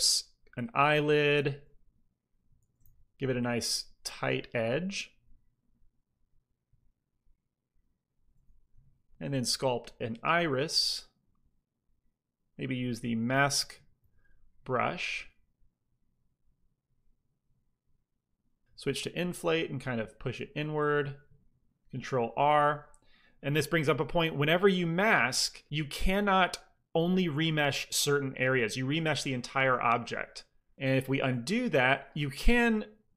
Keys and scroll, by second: 2.0 shift+c, 2.1 f, 2.5 f, 3.0 f, 6.6 p, 6.8 f, 8.4 shift+c, 8.5 f, 9.3 f, 12.9 m, 13.2 f, 13.9 f, 17.6 ctrl+i, 18.1 f, 18.3 i, 20.7 f, 22.4 ctrl+r, 22.5 typing, 23.9 f, 31.2 ctrl+z.